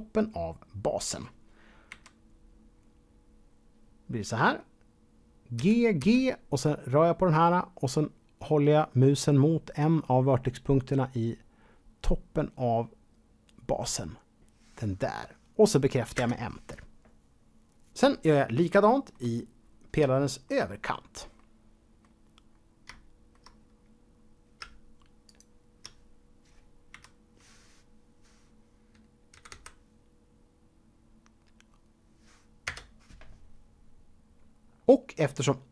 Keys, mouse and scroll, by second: 1.9 KP_1, 2.7 scroll up 1, 4.6 scroll up 2, 5.5 g, 6.0 g, 16.1 Return, 18.8 shift+middle click, 19.2 shift+scroll up 1, 19.3-20.0 scroll down 2, 20.1 shift+middle click, 20.7-21.1 scroll up 2, 21.4 middle click, 22.5-22.9 scroll up 2, 25.2 alt+click, 26.9 KP_1, 29.3 g, 29.5 g, 32.7 Return.